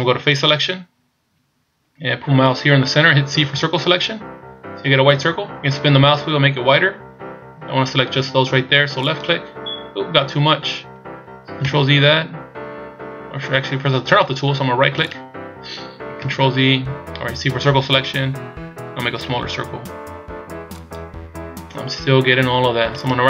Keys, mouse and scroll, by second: 0.4 click, 3.4 c, 15.0 right click, 16.2 ctrl+z, 17.3 c, 23.0 right click.